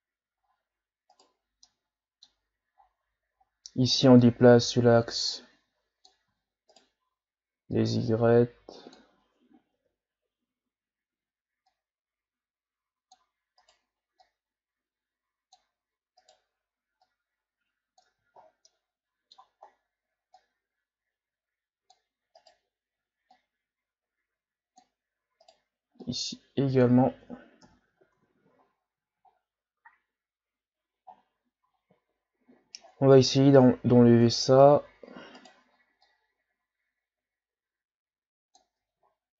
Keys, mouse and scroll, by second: 0.4-0.8 ctrl+scroll up 3, 1.1 right click, 1.4 scroll down 2, 1.6 middle click, 2.5-3.4 scroll up 5, 3.4 scroll up 1, 4.2-6.3 drag, 6.3 ctrl+z, 6.7 right click, 7.7-9.7 drag, 9.7 KP_1, 11.7-13.6 drag, 13.6 right click, 14.2-16.2 drag, 16.2 right click, 17.0-18.2 drag, 18.2 ctrl+z, 18.4 scroll down 3, 18.7-19.7 middle drag, 19.7-20.3 scroll up 1, 20.3-22.4 drag, 22.4 right click, 22.5-23.3 scroll up 1, 23.3-25.4 drag, 25.4 right click, 26.0-27.6 drag, 27.6 KP_1, 28.0 Tab, 28.6-30.2 scroll down 9, 30.2-31.1 scroll down 1, 31.1-32.2 shift+scroll up 13, 32.8-34.1 shift+scroll down 5, 34.1 Tab, 35.4 right click, 36.1-38.7 drag, 38.7 Tab, 39.1-39.3 scroll down 4.